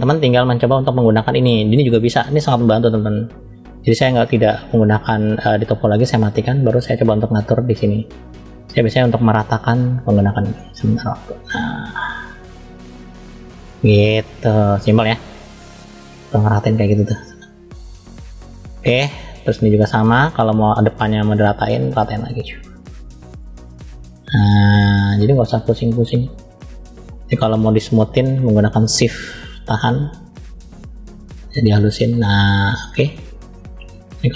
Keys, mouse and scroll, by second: 1.6 click, 5.4 click, 6.4 middle click, 7.8 click, 14.6 middle click, 16.4 middle click, 17.3-18.6 drag, 18.6 middle click, 19.8 middle click, 20.9-21.5 scroll down 1, 21.5-22.8 drag, 28.0 click, 28.0 scroll up 2, 29.6 shift+click, 32.9 middle click, 34.0-34.3 shift+drag.